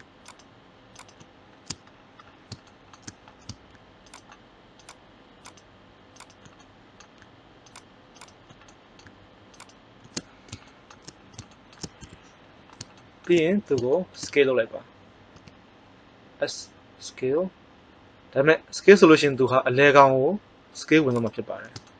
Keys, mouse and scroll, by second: 4.1-5.4 right drag, 10.1-11.7 middle drag, 11.9 KP_1, 15.3 s, 21.2 click.